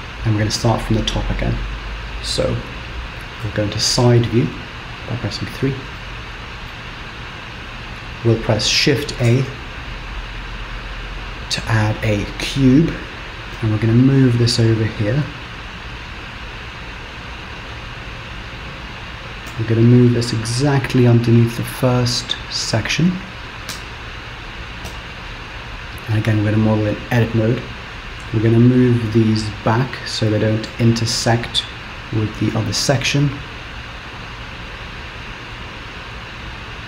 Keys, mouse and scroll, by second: 4.0 KP_3, 6.1 shift+middle click, 7.0-9.1 scroll up 1, 9.4 shift+a, 13.6 g, 18.3-19.1 scroll up 3, 19.6 g, 23.8 Tab, 24.9 z, 26.6 click, 28.3 g.